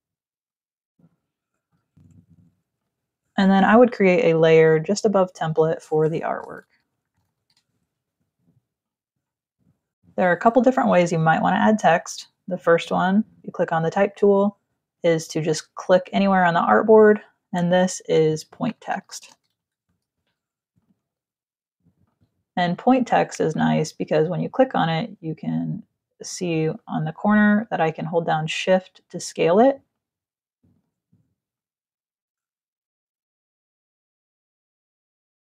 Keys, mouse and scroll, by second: 2.5 click, 3.6 click, 4.9 click, 6.2-7.3 typing, 8.5 click, 12.7 click, 15.2 click, 18.4-20.2 typing, 20.4 ctrl+click, 21.6 click, 22.4 click, 26.4 shift+click, 29.5 click, 30.9 shift+click, 32.7 click, 33.3 v, 33.6 click, 35.4-35.5 typing.